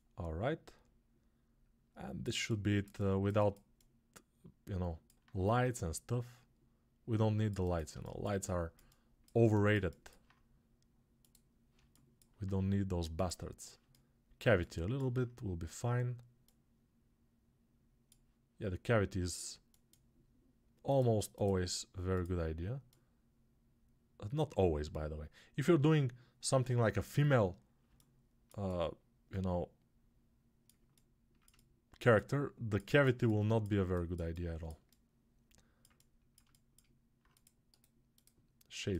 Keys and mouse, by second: 27.8-30.7 alt+shift+drag, 27.8-30.7 alt+shift+middle drag, 37.3-38.9 right drag.